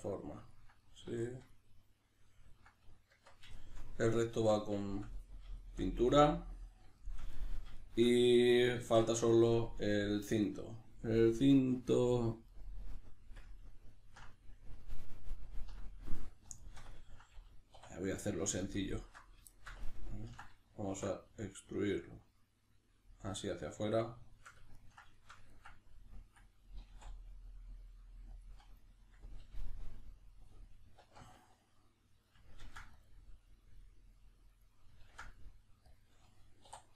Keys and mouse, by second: 0.0 middle click, 1.5 middle click, 2.4 ctrl+middle click, 3.1 Tab, 3.8 middle click, 4.4 Tab, 4.8-18.3 shift+middle drag, 8.8 alt+q, 17.7 3, 18.3 alt+right click, 18.6 alt+shift+right click, 18.9 alt+shift+right click, 19.6-24.4 ctrl+shift+middle drag, 20.9 alt+e, 24.4 shift+click, 24.8-28.4 ctrl+middle drag, 26.8 s, 28.4 click, 29.0-34.6 middle drag, 31.0 alt+q, 32.6 ctrl+r, 34.6 right click, 35.0 ctrl+r, 36.0 click, 36.6 3.